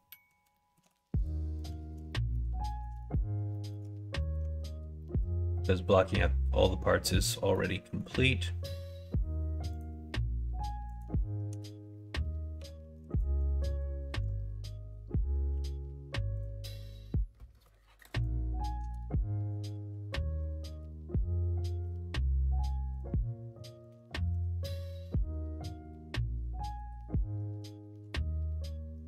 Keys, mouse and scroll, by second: 0.0 middle click, 0.4 shift+middle click, 2.0 middle click, 2.6 shift+middle click, 2.8 middle click, 3.4 shift+middle click, 4.1 middle click, 4.3 Tab, 4.9 middle click, 5.4 middle click, 7.4 middle click, 8.5 k, 11.4 ", 12.4 1, 15.4 k, 22.0 k.